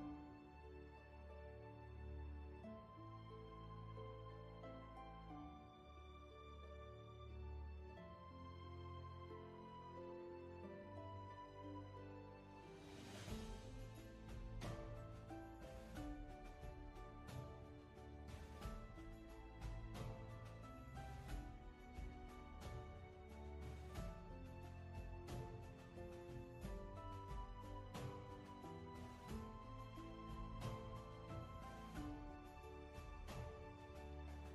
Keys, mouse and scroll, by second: 2.4 ctrl+z, 15.8 ctrl+z, 17.4 ctrl+z, 20.1 space, 21.9 ctrl+z.